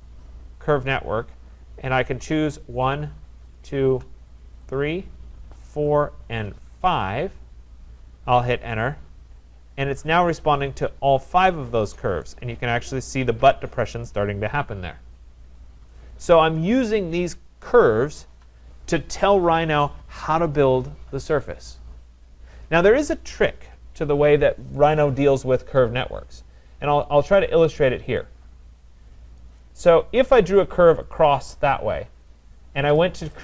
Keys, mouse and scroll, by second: 0.8 click, 2.6 click, 3.5 shift+click, 4.7 click, 5.9 click, 6.9 click, 8.5 Return, 10.6 click, 11.1-11.4 scroll, 12.2 right click, 12.4 scroll, 13.2 scroll, 16.2 right click, 16.3 scroll, 17.1 click, 18.3 Delete, 20.4 right click, 27.1 click, 28.2 click, 29.5 click, 30.2 Return, 31.1 click, 32.4 click.